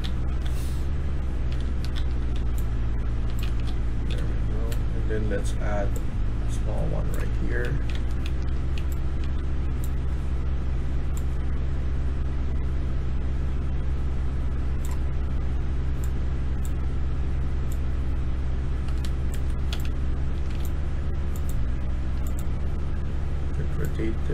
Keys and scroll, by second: 0.0-4.6 typing, 6.9-9.2 typing, 19.2 Escape, 19.4-20.9 typing.